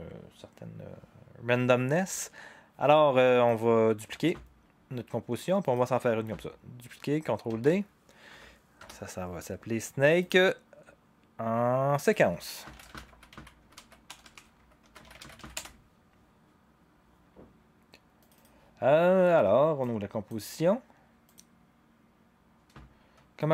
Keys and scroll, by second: 7.5 ctrl+d, 8.8 Return, 12.4-15.9 typing.